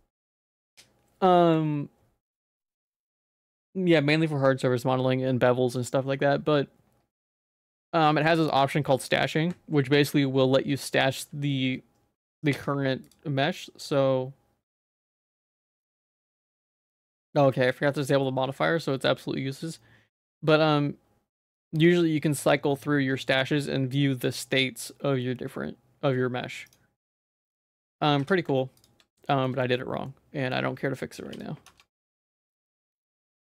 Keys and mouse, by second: 12.6 y, 27.3 middle click, 27.9 ctrl+s, 28.2 2, 29.3 middle click, 29.6 shift+middle click, 30.1 middle click, 31.2 p, 31.7 Tab, 32.4 click, 32.7 Tab, 33.0 a.